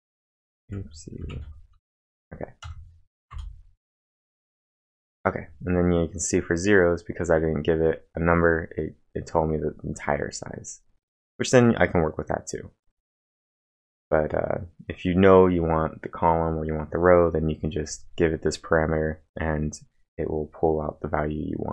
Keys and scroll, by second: 0.0-1.8 typing, 2.0 ctrl+`, 2.6 Up, 3.3 Return, 5.2-5.9 typing.